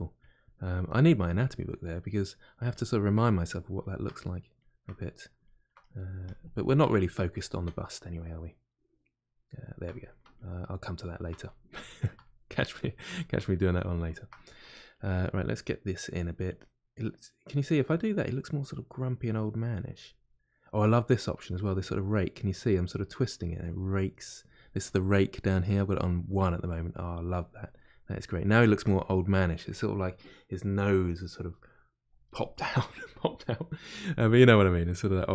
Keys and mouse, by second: 0.2-1.4 drag, 1.4-2.7 middle drag, 2.7 shift+click, 3.2-6.2 middle drag, 6.2 shift+click, 6.8-14.9 middle drag, 14.9 click, 15.6 middle click, 16.6-19.8 drag, 20.2-24.0 drag, 27.0 click, 27.6-35.3 middle drag.